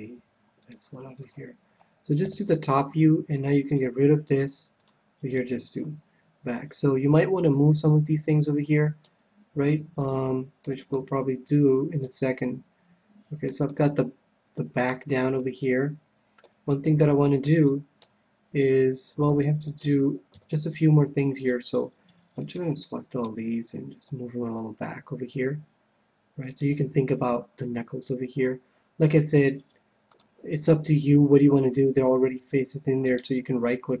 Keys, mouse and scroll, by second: 0.1 g, 1.3-2.4 drag, 2.2 KP_7, 2.4 middle click, 3.6-6.5 drag, 9.0-10.7 middle drag, 10.8 KP_1, 11.9-20.5 middle drag, 20.2 KP_7, 22.4-24.8 right drag, 24.0-25.9 drag, 30.1-31.9 drag, 33.0-34.0 right drag.